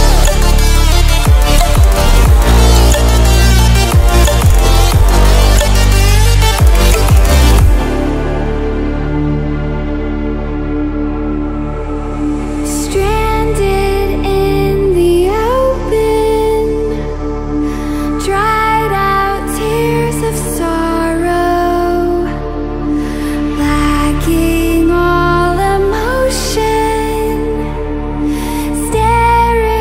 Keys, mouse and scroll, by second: 1.9 Delete, 4.0-5.0 ctrl+alt+scroll up 2, 5.0-6.0 ctrl+alt+scroll up 1, 8.7 click, 15.5 click, 18.2 click, 20.3 ctrl+alt+scroll down 1, 21.0 space, 21.1 click, 21.2 click, 21.4-21.7 space, 22.3 ctrl+alt+scroll down 1, 26.2 right click, 27.8 click.